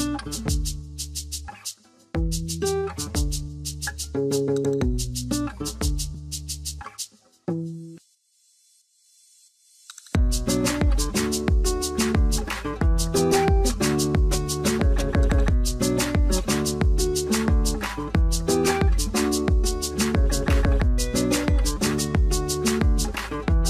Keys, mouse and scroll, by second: 0.4 space, 0.5 Tab, 1.6 ctrl+0.